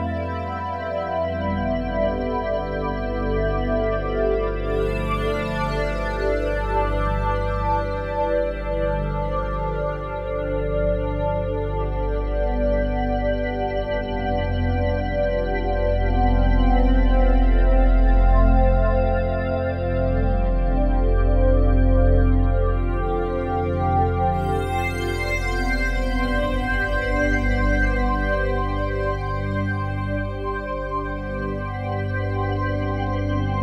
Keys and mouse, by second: 1.4-2.7 drag, 3.1 click, 3.9-5.0 drag, 6.0 click, 6.6-7.6 drag, 8.1 click, 8.9 click, 10.3 click, 11.3 g, 12.2 click, 13.6 click, 14.0 g, 15.0 click, 15.7 click, 15.9 g, 16.6 click, 17.2 click, 17.4 g, 18.2 click, 20.1 alt+shift+click, 20.6 alt+click, 21.8 alt+click, 22.4 click, 22.9 alt+shift+click, 23.6-25.0 alt+drag, 25.8 1, 26.4 alt+shift+click, 26.9 ctrl+alt+click, 27.9 click, 28.8 g, 29.2 x, 30.3 click, 31.0 g, 31.4 z, 31.9-33.6 drag.